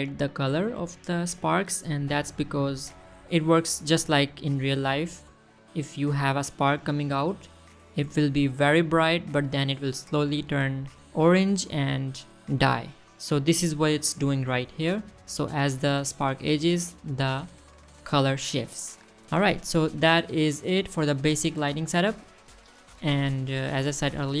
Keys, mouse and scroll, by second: 3.0-3.6 middle drag, 3.6-4.8 scroll up 3, 4.8 middle click, 7.4 middle click, 8.2-8.5 middle drag, 8.9-9.3 middle drag, 9.9-10.2 middle drag, 11.2 scroll down 2, 13.0 shift+middle drag, 15.4 click, 17.3 middle drag, 19.8 scroll down 2, 21.1 click, 21.5 scroll down 2, 22.0 shift+middle click, 22.5 shift+middle click, 22.7 middle drag, 23.2 shift+middle drag, 23.3-24.1 shift+scroll up 4, 24.1 middle click.